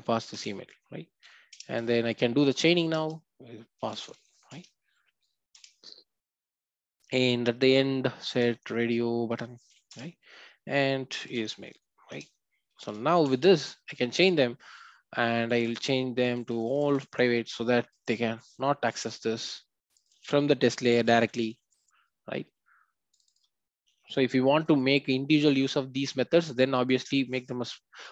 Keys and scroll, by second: 2.9 Return, 9.9 Return.